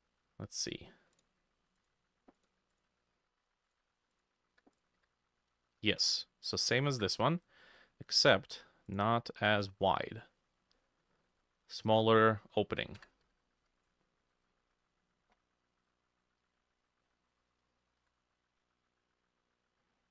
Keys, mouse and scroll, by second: 0.0 shift+middle click, 2.8 double click, 4.2 double click, 4.6 h, 5.0 h, 5.7 alt+middle click, 6.5 alt+shift+middle click, 8.2 shift+middle click, 8.3 shift+a, 13.0 Tab, 13.3 a, 13.7 x, 16.9-18.4 ctrl+middle drag.